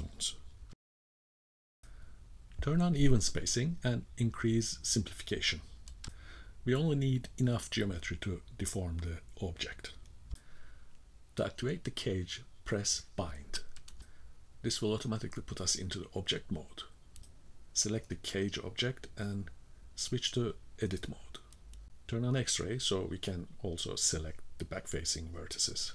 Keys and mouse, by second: 0.3 middle click, 4.1 shift+middle click, 5.6-9.2 drag, 12.7-13.7 drag, 17.8 Tab, 18.5 middle click, 19.8 KP_1, 20.7 shift+middle click, 21.4 shift+middle click, 22.8 click, 23.2-24.6 drag, 25.4 click.